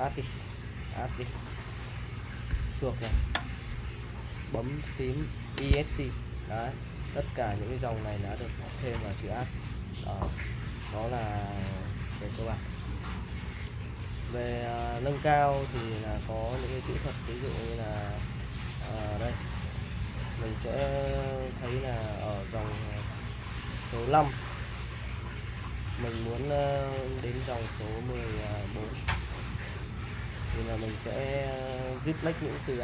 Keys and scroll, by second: 0.1-0.9 typing, 2.5 \, 5.7 Escape, 7.3-11.1 typing, 12.5 u, 13.8-17.0 typing, 18.8-19.7 typing, 25.9-30.4 typing.